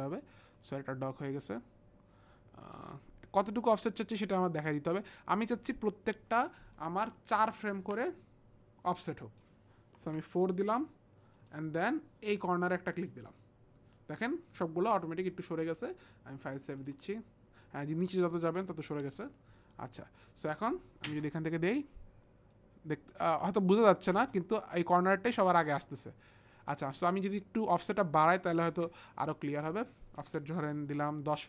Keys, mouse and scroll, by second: 0.4 click, 1.5 click, 3.9 click, 7.4 click, 9.1 click, 10.0 KP_4, 11.3 click, 13.0 click, 15.7 click, 16.8 click, 20.2 click, 21.1 space, 22.6 click, 24.1 space, 25.3 space, 28.0 click, 28.7 ctrl+z, 28.7 click, 28.7 space, 30.0 click.